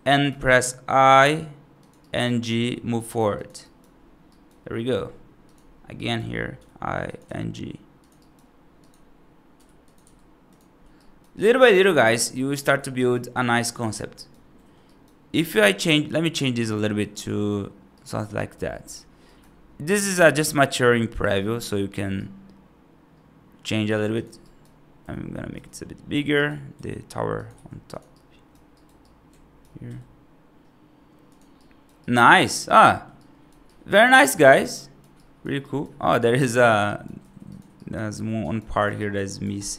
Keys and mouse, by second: 0.9 i, 1.9 right click, 2.3 g, 3.5 right click, 4.1 right click, 4.6 middle click, 5.4 click, 5.9 right click, 6.4 i, 7.1 g, 8.0 right click, 9.4 i, 9.9 g, 10.8 right click, 11.2 right click, 11.5 right click, 11.9 right click, 12.5 F2, 12.8 right drag, 13.2-13.5 middle drag, 14.0 right drag, 14.4 middle drag, 14.7 right drag, 15.2 right drag, 15.6 click, 16.2 y, 17.8 right drag, 18.2 right drag, 18.7 middle click, 19.1 right drag, 22.0-23.7 right drag, 24.0 click, 24.3 right drag, 24.9 F2, 25.4 z, 26.2 right click, 26.6 s, 27.4 g, 28.0 right click, 28.6 right click, 28.9 right click, 29.7 g, 31.4 right drag, 31.9 right drag, 32.2 right drag, 32.8 middle drag, 33.0 right drag, 33.5-34.2 right drag, 34.3 right drag, 34.6 right drag, 35.0 right drag, 35.5 right drag, 36.0 right click, 36.3 F3, 36.7 right click, 37.0 F2, 37.3 click, 37.6 right click, 38.0 F3, 38.3 right click, 38.8 right click, 39.2 right click, 39.5 right click.